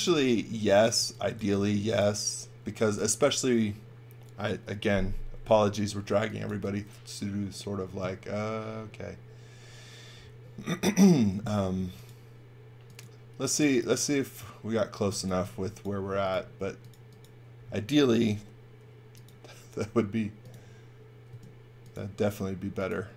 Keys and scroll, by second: 0.1 v, 0.9 x, 1.3 v, 2.6 x, 2.9 v, 6.1 x, 6.4 v, 11.6 space, 14.8-15.9 typing, 18.2 r, 21.2 space.